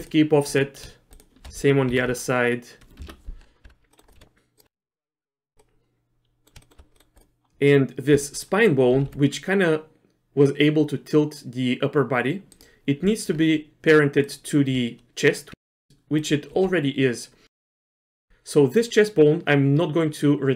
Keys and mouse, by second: 0.5 click, 1.9 ctrl+p, 3.6 Tab, 3.9 middle click, 4.2 r, 4.7 Tab, 5.2 click, 5.6 middle click, 6.3 click, 6.6 shift+click, 8.1 Tab, 8.9 r, 13.0 Tab, 15.5 Tab, 16.2 click, 16.6 r, 18.1 middle click.